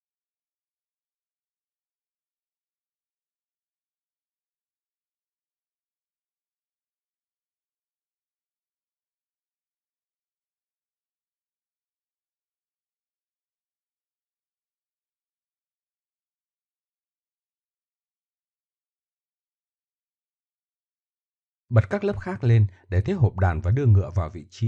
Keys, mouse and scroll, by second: 2.4 a, 4.4 shift+e, 5.2 click, 6.1 Tab, 7.8 middle click, 8.2 right click, 8.3 middle click, 8.4 right click, 10.1 KP_1, 15.0 right drag, 16.1 middle click, 16.4 middle drag, 17.7-18.8 middle drag, 24.5 middle click.